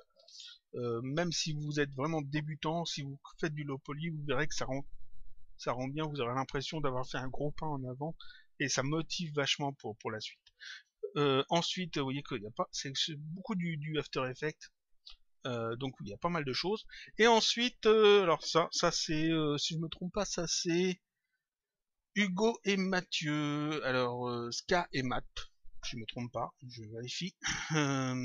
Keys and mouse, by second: 26.5 click.